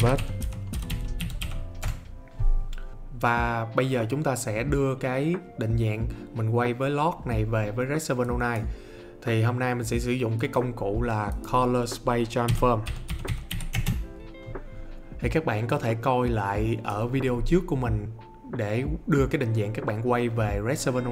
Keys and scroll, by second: 0.0-1.9 typing, 12.2-14.0 typing.